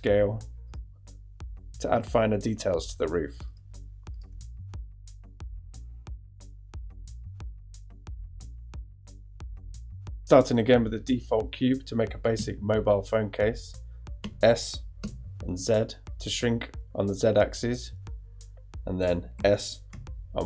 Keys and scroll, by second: 4.5 shift+i, 4.9 e, 6.1 shift+i, 6.3 Tab, 12.3 super+Tab, 14.2 s, 15.0 z, 19.3 s, 19.9 y.